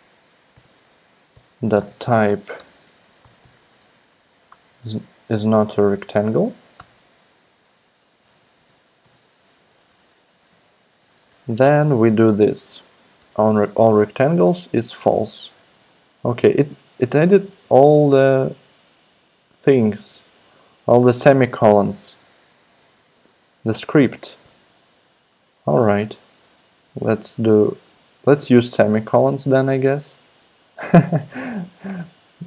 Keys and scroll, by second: 0.0-6.7 typing, 0.0 Left, 1.1 Right, 7.9-9.5 typing, 9.5 Down, 9.7 Down, 9.9 Tab, 10.3 Right, 10.5 Right, 11.0 space, 11.3 shift+[, 11.6 Return, 11.9 super+v, 13.2 BackSpace, 15.4 BackSpace, 23.7 super+a, 26.8 super+s.